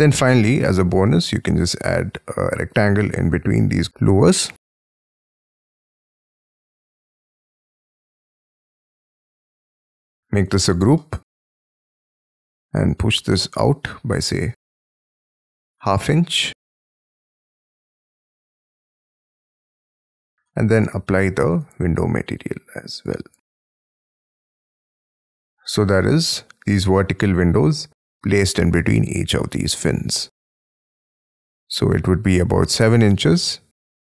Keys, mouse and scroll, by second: 0.9 scroll down 1, 1.1 scroll up 2, 1.2 r, 3.2 Escape, 3.9 scroll down 10, 4.0 right click, 4.4 click, 5.0 scroll down 5, 5.7 shift+middle click, 6.7-7.7 scroll up 19, 7.7 middle click, 8.2 scroll up 6, 9.3-9.6 scroll up 1, 9.6 space, 9.7 double click, 10.1 g, 10.6 double click, 11.0 middle click, 11.7 scroll down 4, 12.1 scroll up 3, 12.3 p, 15.5-19.2 typing, 17.5 Return, 18.7 scroll down 7, 19.6 scroll down 5, 20.1 Escape, 20.5 middle click, 20.8 b, 21.5 alt+click, 22.0 space, 22.6 double click, 22.8 double click, 23.0 double click, 23.2 b, 23.7 space, 23.9 Escape, 24.0 space, 24.1 Escape, 24.3 scroll down 8, 24.8 middle click, 26.6-27.3 scroll up 18, 29.3-30.0 scroll down 18, 30.5-31.3 scroll up 18, 31.9 scroll up 6, 32.4 t.